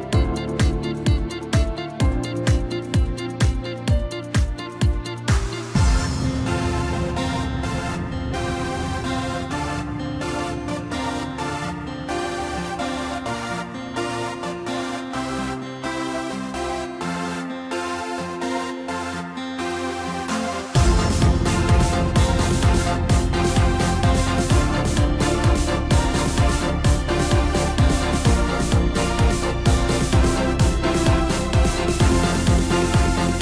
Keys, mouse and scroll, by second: 2.4 s, 4.6 g, 7.1-7.5 scroll up 3, 7.5 middle click, 8.4 KP_1, 9.4 g, 12.7-13.0 scroll up 2, 13.0-15.5 middle drag, 15.5 KP_1, 16.2-17.2 scroll up 1, 17.2 scroll down 2, 17.5-18.1 middle drag, 18.4-19.6 middle drag, 19.6 KP_7, 20.3-21.1 scroll up 1, 21.1 Tab, 21.6-22.2 scroll up 1, 22.2-23.3 scroll down 1, 24.2 ctrl+r, 33.1-33.4 scroll up 1.